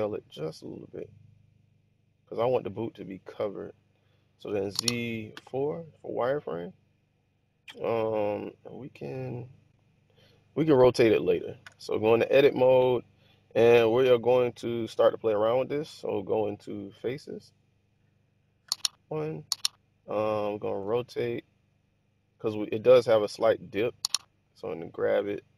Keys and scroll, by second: 0.4 s, 4.5 z, 5.3 4, 11.6 Tab, 18.6 1, 20.7 r, 24.0 g.